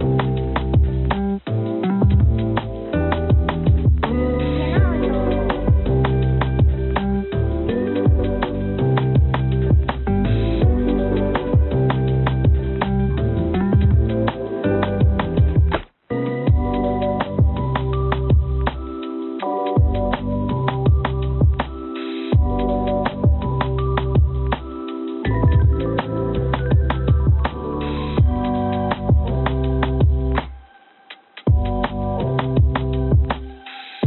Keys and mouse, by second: 1.1 a, 3.2 click, 8.0 ctrl+r, 10.6 ctrl+r, 13.5 click, 14.9 ctrl+r, 31.4 3, 31.7 click, 32.5 e.